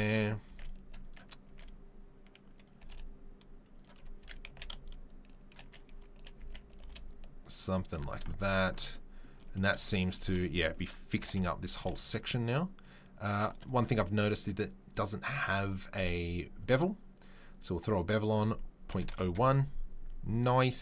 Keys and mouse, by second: 0.4 s, 1.4 s, 2.7 g, 4.2 s, 5.3-13.2 middle drag, 6.3 s, 6.8 g, 11.1 g, 13.2 click, 13.3-13.7 middle drag, 13.7 click, 13.8-14.9 middle drag, 14.9 click, 15.0 middle click, 16.7-20.8 drag.